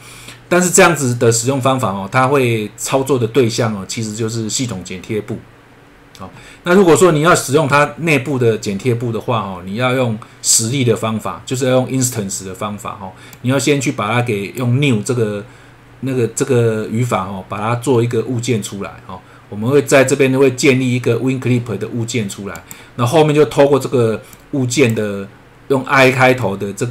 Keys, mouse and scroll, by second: 0.5 click, 7.2-8.5 scroll down 1, 13.3 click, 22.5 click, 24.3 click, 26.4 click.